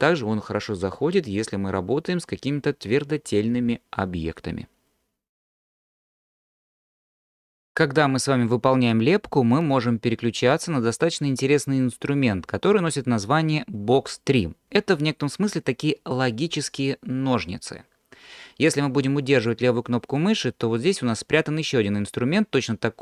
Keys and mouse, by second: 20.2-23.0 drag.